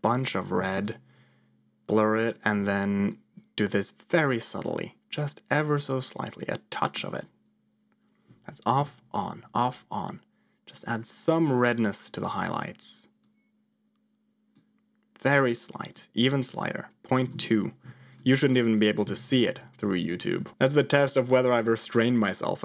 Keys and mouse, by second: 0.7 ctrl+shift+click, 2.1 ctrl+shift+click, 3.1-6.5 drag, 8.2 m, 8.7 m, 9.2 m, 9.5 m, 13.2-14.4 drag, 15.1 click, 16.1-17.4 drag, 18.9 m, 19.4 m, 19.9 m, 20.3 m, 21.5 click.